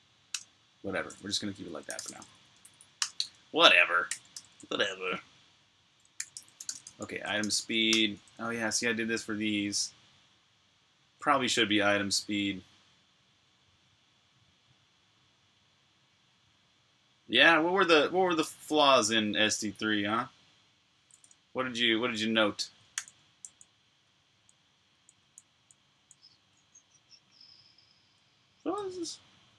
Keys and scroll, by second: 0.2 Return, 1.7-4.4 typing, 5.8-9.9 typing, 21.4-28.0 typing.